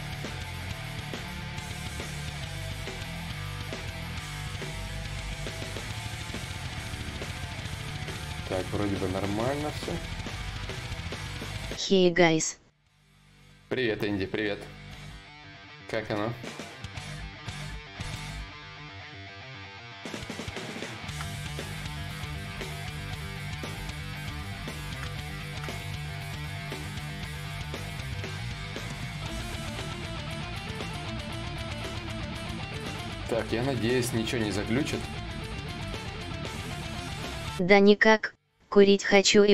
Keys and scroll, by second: 0.9 ctrl+z, 0.9 y, 15.3 shift+d, 18.1 s, 21.5 d, 26.3 d, 30.7 d.